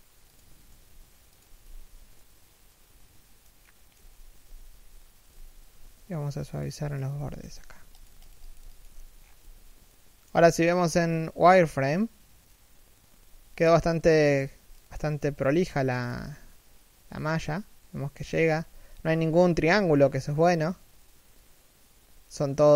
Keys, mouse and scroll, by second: 0.4 right click, 0.4 g, 1.9 middle click, 3.7 3, 4.0 1, 4.8 z, 5.5 Tab, 6.2 alt+right click, 6.9 z, 7.0 w, 8.8 scroll down 1, 9.0 z, 9.5 shift+middle click, 13.2 right click, 14.0 g, 14.8 right click, 15.0 shift+right click, 15.1 g, 16.9-17.6 scroll up 1, 18.6 z, 19.6-19.9 scroll down 1, 19.9 shift+middle click.